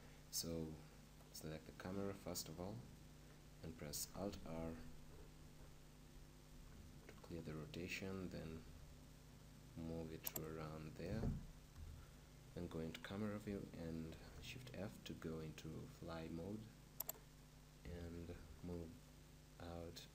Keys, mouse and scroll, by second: 1.3-4.1 right drag, 4.1 alt+space, 6.6 alt+r, 7.3-9.4 middle drag, 8.6 g, 10.4-12.4 drag, 11.7 KP_0, 12.9-14.1 drag, 14.1 middle click, 14.1 shift+f, 17.1-19.1 drag, 18.3 shift+f, 19.5-20.1 middle drag.